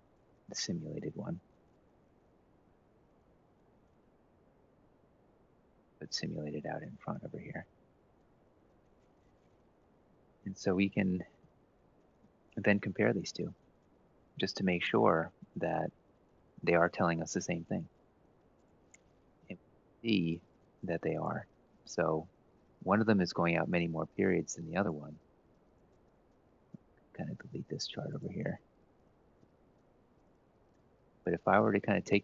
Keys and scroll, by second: 3.6 Left, 3.8 Right, 4.1 F2, 4.5 Home, 4.9-7.9 typing, 7.9 Up, 8.1 Up, 10.4 shift+Down, 10.7 ctrl+shift+Right, 11.9 ctrl+shift+Right, 22.0 ctrl+x, 29.9 Delete, 30.2 ctrl+v.